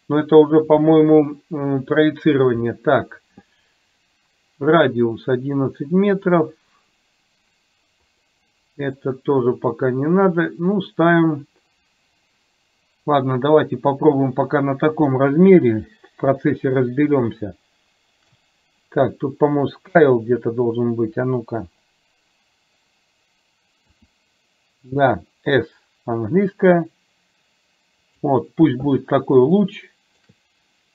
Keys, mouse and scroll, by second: 8.1 click, 8.9 click, 16.5-18.4 shift+middle drag, 23.9 s, 29.5-30.3 shift+middle drag.